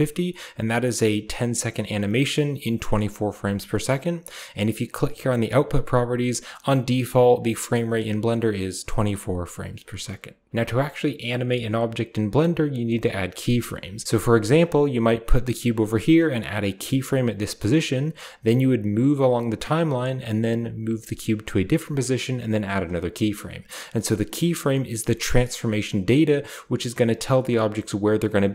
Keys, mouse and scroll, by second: 5.1 click, 7.6 click, 14.0-16.5 shift+middle drag, 14.3 shift+g, 17.9 right click, 18.8-21.2 drag, 20.7 g.